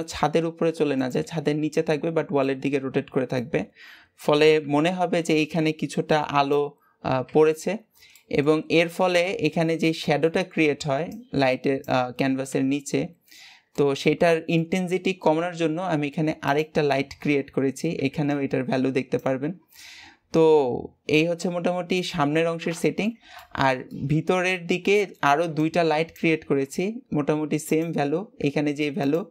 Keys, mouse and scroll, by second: 2.3-7.4 middle drag, 7.5-8.0 scroll down 2, 8.0 middle click, 8.4-8.8 scroll up 2, 8.8-9.4 shift+middle drag, 9.4-9.9 scroll up 2, 9.9-12.9 middle drag, 12.9-13.6 scroll down 6, 13.6-15.2 middle drag, 15.2-16.3 scroll up 1, 16.3 click, 20.2-22.2 middle drag, 22.2-22.7 scroll up 1, 22.7-27.6 shift+middle drag, 27.6 click, 28.9 click.